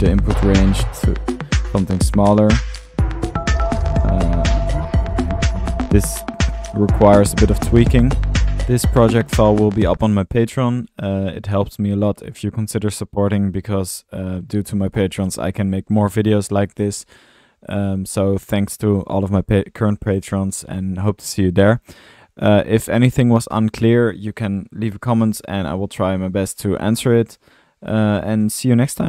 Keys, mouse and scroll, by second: 0.0-2.9 middle drag, 5.6 click, 6.0 typing, 7.6-8.9 drag, 8.3-9.0 typing, 9.0-15.4 drag, 16.5 middle click, 17.2-21.8 drag, 24.2-24.6 typing, 24.5 middle click, 25.1-27.3 drag, 27.3 middle click, 27.3-27.8 typing, 27.9 click, 28.4-28.7 drag.